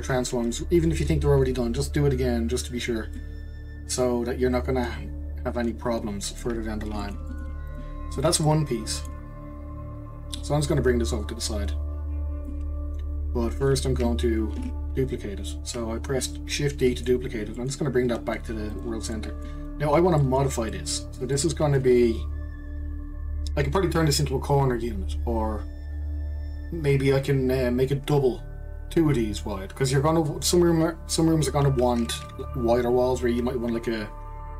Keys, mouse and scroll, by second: 1.9-2.6 scroll down 2, 2.7-3.2 scroll up 2, 3.2-6.3 middle drag, 6.7 scroll down 2, 7.0-7.7 shift+middle drag, 7.7 click, 8.2 click, 8.4-10.3 middle drag, 10.3 click, 12.8-13.2 scroll down 2, 14.6 shift+d, 19.1 middle click, 19.8-20.2 scroll up 1, 20.2-24.3 shift+middle drag.